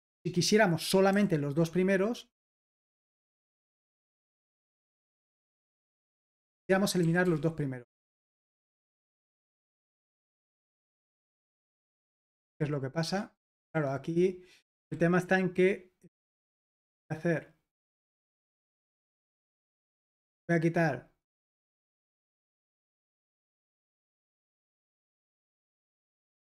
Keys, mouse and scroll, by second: 0.0 super+l, 2.8-7.2 typing, 9.0-9.7 typing, 10.2 Escape, 11.5-12.3 typing, 14.3-14.6 typing, 16.9-18.6 typing, 19.8-20.7 typing, 22.9-25.1 typing, 25.5 ctrl+p, 25.9 Return.